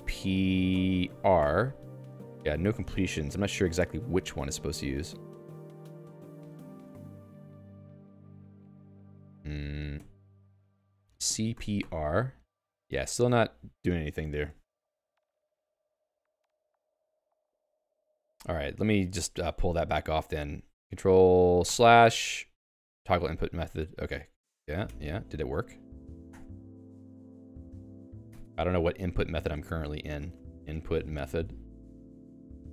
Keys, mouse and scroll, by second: 9.9 c, 13.2 BackSpace, 14.3 BackSpace, 14.5 BackSpace, 17.9 BackSpace, 18.1 Escape, 21.6 ctrl+\, 23.8 ctrl+\, 24.7 ctrl+g, 24.8 Escape, 25.3 j, 25.7 i, 26.2 ctrl+\, 27.1 ctrl+\, 27.5 ctrl+\, 28.3 Escape, 29.6 ctrl+s, 30.4-32.0 typing.